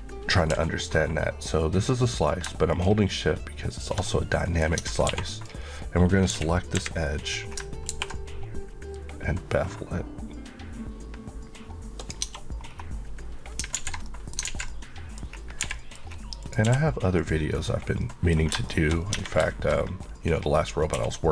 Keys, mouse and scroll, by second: 2.7 shift+click, 4.1 middle click, 5.1 2, 5.4 click, 6.4 KP_1, 7.4 scroll, 7.5-7.9 scroll up 2, 7.9 ctrl+b, 12.1 click, 12.3 Tab, 12.7 scroll down 1, 13.8 alt+z, 14.1 middle click, 14.5 alt+z, 14.7 alt+middle click, 15.3-15.6 scroll up 1, 15.7 h, 15.8 middle click, 16.0 scroll up 1, 16.4 click, 16.7 q, 17.2 click, 17.7 click, 18.0 middle click, 18.4-19.0 scroll up 3, 18.7 shift+middle click, 19.2 Tab, 19.5 shift+middle click, 19.7 scroll up 1, 21.0 scroll up 1, 21.0 1.